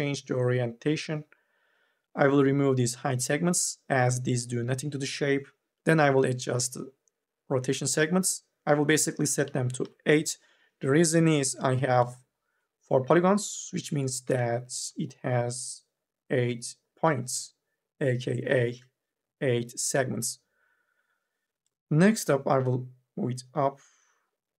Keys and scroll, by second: 9.7 Return, 11.2 3, 14.1 1, 18.5 2, 18.7 e.